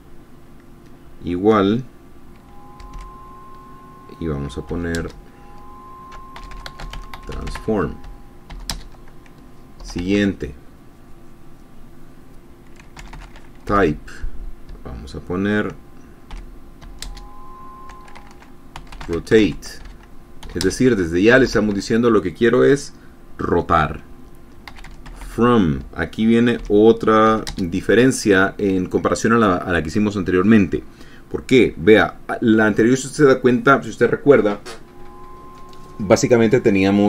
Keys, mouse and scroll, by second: 0.0-0.3 typing, 3.4 shift+o, 5.4 shift+space, 6.6-9.2 typing, 10.3 Return, 10.4 Tab, 13.2-14.7 typing, 16.8 shift+0, 17.5 shift+space, 19.0-21.1 typing, 21.9 Return, 22.0 Tab, 24.9-28.0 typing.